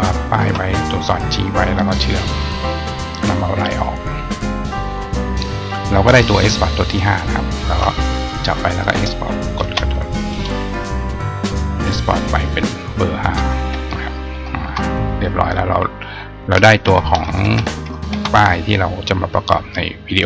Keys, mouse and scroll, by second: 0.1 shift+click, 4.3 right click, 7.2 shift+click, 19.5 click.